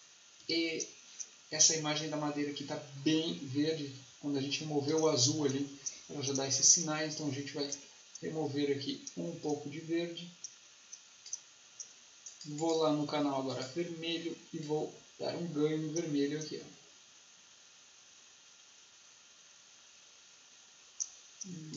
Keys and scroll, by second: 0.3 Delete.